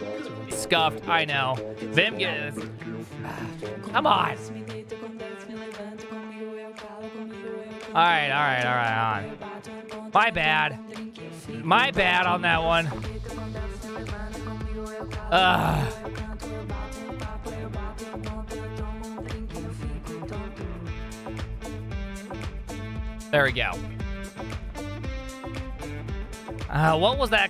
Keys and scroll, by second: 0.7 alt+m, 1.9 alt+f, 2.1 alt+h, 2.5 alt+n, 2.6 ctrl+t, 3.3 _, 24.3 alt+f, 25.1 alt+l, 25.3 alt+f.